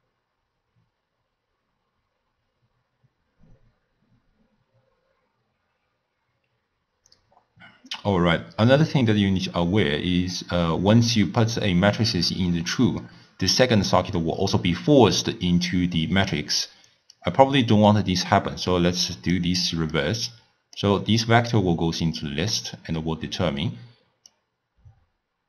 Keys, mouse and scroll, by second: 17.2 click, 20.0 click, 24.4-25.4 drag.